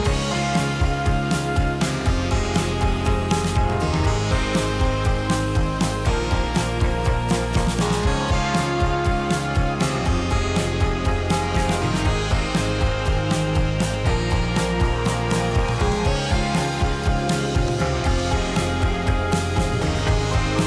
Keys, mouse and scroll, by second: 0.3 g, 2.1 g, 9.1 alt+d, 12.2 g, 13.3 r, 14.9 g, 15.8 g, 16.4 drag, 16.6-19.7 middle drag, 19.7 ctrl+s, 20.1-20.6 scroll up 1.